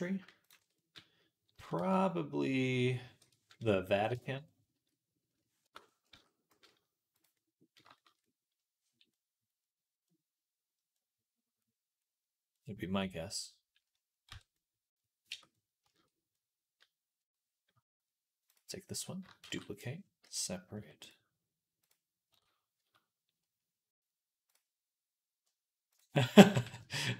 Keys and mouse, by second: 0.3 alt+shift+click, 0.5-5.9 middle drag, 1.4 s, 5.9 s, 7.2-8.4 middle drag, 8.4 click, 9.4 click, 9.6 middle click, 10.5-12.8 middle drag, 13.1-18.3 middle drag, 14.1 Tab, 15.1 Tab, 18.3 click, 18.8-21.7 shift+middle drag, 19.3 shift+d, 20.1 p, 20.6 Tab, 21.7 click, 22.1 Tab, 22.1-24.4 middle drag, 22.6 a, 24.4-25.8 drag, 25.8-27.1 middle drag, 26.2 g.